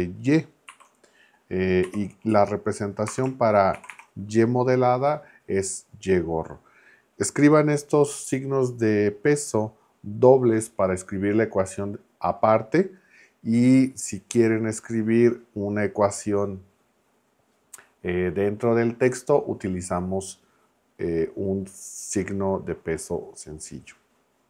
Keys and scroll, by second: 0.7 shift+[, 1.8 y, 2.3 Right, 3.1 space, 3.7 shift+4.